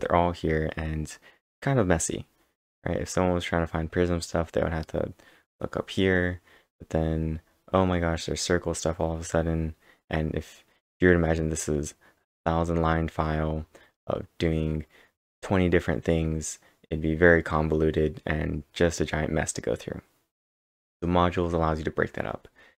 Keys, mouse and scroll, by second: 6.5-6.8 scroll down 1, 6.8 scroll down 1, 7.4 scroll down 3, 9.6-10.8 scroll up 5, 13.1 scroll up 3.